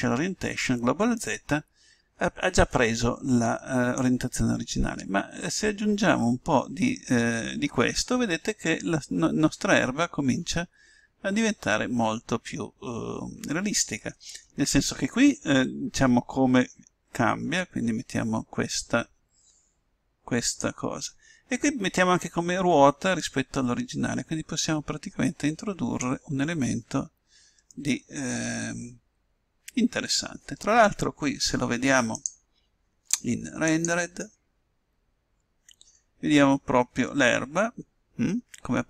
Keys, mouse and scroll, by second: 4.9-6.4 drag, 23.2-24.9 drag, 27.5-30.4 middle drag, 30.6 middle click, 30.8-31.2 scroll down 1, 33.1-34.8 drag.